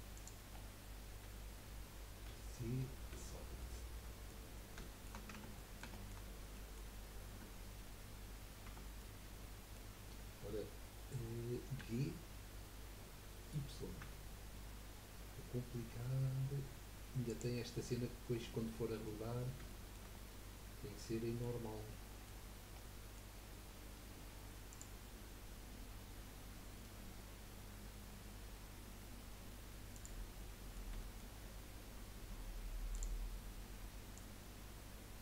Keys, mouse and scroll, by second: 0.5-1.0 scroll down 2, 2.3 z, 3.6 middle click, 4.5 scroll down 3, 4.8 shift+middle click, 5.3 Tab, 5.5-6.2 middle drag, 6.2-6.5 scroll up 2, 6.5-7.3 middle drag, 7.3 Tab, 7.7-8.6 scroll up 1, 8.6 Tab, 8.9-11.8 middle drag, 11.8 g, 17.6 scroll up 1, 17.7 scroll down 3, 17.9-19.4 middle drag, 19.4-19.7 scroll down 3, 19.7-21.3 shift+middle drag, 21.6-21.9 scroll up 4, 21.9 middle click, 22.4-22.7 scroll down 4, 22.9 middle click, 23.3-24.7 scroll down 3, 24.7 click, 25.7 scroll up 2, 29.9 click, 30.4-31.3 middle drag, 31.3-32.9 scroll up 1, 32.9-34.3 drag.